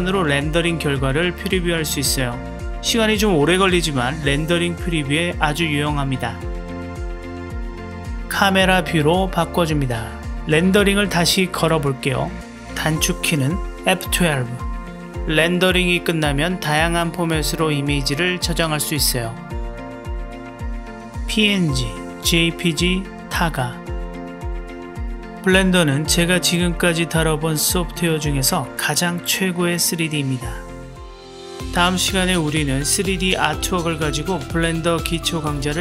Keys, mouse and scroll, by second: 0.8 click, 2.1 click, 5.1-7.2 drag, 9.0-11.3 drag, 27.5-31.3 drag, 33.1-35.8 drag.